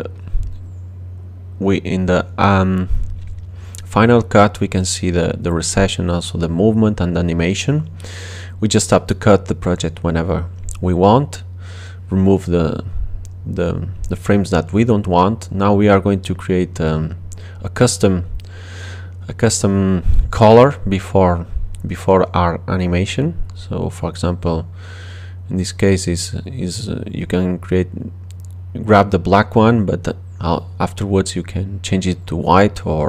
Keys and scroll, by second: 4.5 space, 21.1 super++, 22.7 super++, 25.4 super+j, 25.8 super+j, 26.2 super+j.